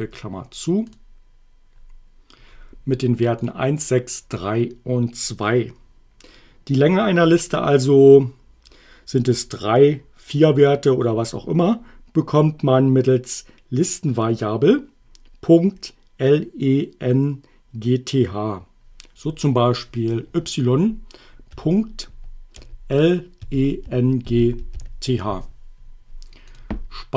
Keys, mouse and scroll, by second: 0.9 click, 3.4 click, 21.5-25.2 typing, 26.5 click.